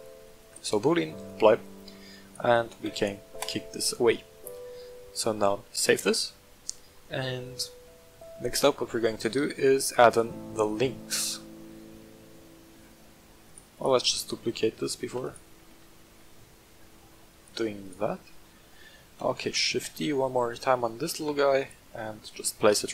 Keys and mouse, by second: 0.7-1.3 drag, 2.2 right click, 2.8 x, 3.8-4.3 middle drag, 4.5 middle drag, 5.7 ctrl+s, 7.0-8.7 middle drag, 8.7-9.5 middle drag, 10.1-11.0 shift+middle drag, 13.4 right click, 13.7 shift+click, 14.2-14.7 middle drag, 15.0 shift+d, 15.2 click, 15.5 g, 15.8 z, 17.4 click, 17.8 right click, 18.4 shift+middle drag, 19.2 shift+d, 19.4 click, 19.7 g, 19.9 z, 21.5 click, 22.3 middle drag.